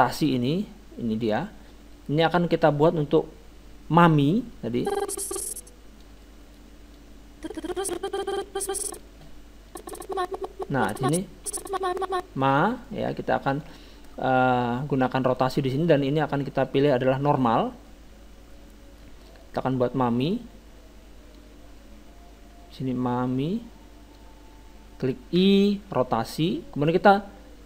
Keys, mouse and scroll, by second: 0.2 r, 4.8-6.5 drag, 6.2-7.5 middle drag, 7.0-8.8 drag, 7.8 middle click, 9.7-11.5 drag, 12.8 middle click, 13.6-15.5 drag, 15.2 middle click, 15.7-17.5 drag, 17.9-21.2 middle drag, 21.4-23.0 drag, 25.4 i.